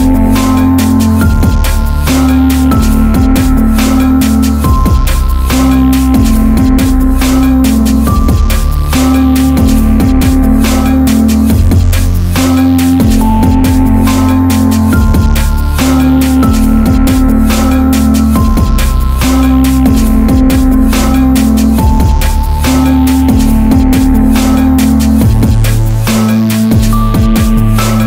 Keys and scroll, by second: 1.5 ctrl+r, 2.0 Escape, 6.8 ctrl+r, 7.2 Escape, 19.4 ctrl+r, 20.6 Escape.